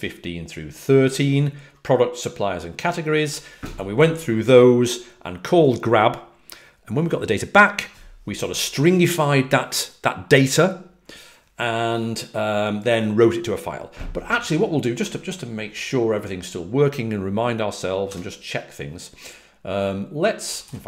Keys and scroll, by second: 3.1 typing, 18.0 typing, 20.4 typing.